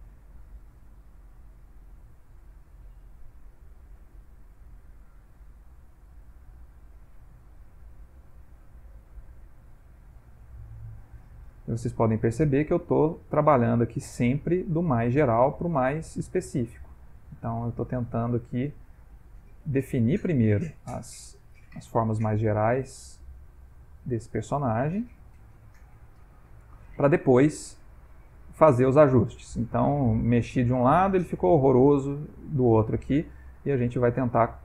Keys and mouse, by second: 1.6 click, 3.2 click, 4.7 click, 6.3 click, 7.6 click, 9.0 click, 9.9 click, 11.5 ctrl+middle click, 12.2 shift+middle click, 12.8 ctrl+middle click, 15.0 f, 16.2 click, 17.4 click, 18.5 click, 19.2 click, 20.0 ctrl+middle click, 20.8 click, 21.5 click, 22.5 ctrl+middle click, 23.6 click, 25.0 click, 25.8 click, 26.5 ctrl+middle click, 27.0 middle click, 30.2 click, 31.0 ctrl+middle click, 32.1 click, 33.4 ctrl+middle click, 34.3 ctrl+middle click.